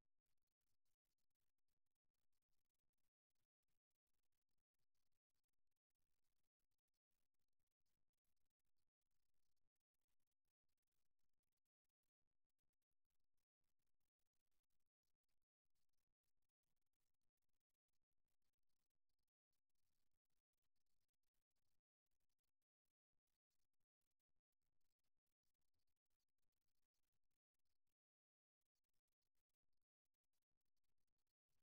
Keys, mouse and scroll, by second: 3.4-5.2 drag, 4.8 e, 8.2 ctrl+z, 10.4 f, 11.6 right click, 12.6 right click, 14.0 right click, 14.4 f, 15.4 right click, 16.9-18.7 middle drag, 24.0-25.6 middle drag, 29.2-31.1 middle drag.